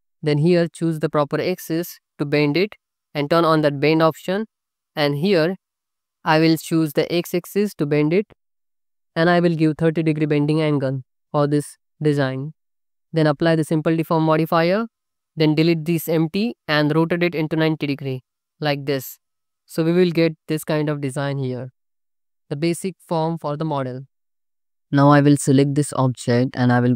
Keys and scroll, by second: 12.5 ctrl+z, 15.6 x, 17.4 r.